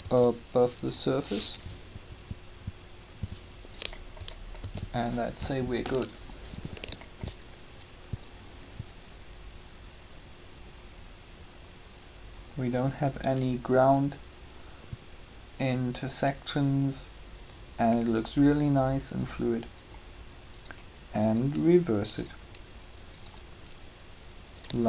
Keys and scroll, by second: 0.0 shift+r, 4.5 alt+a.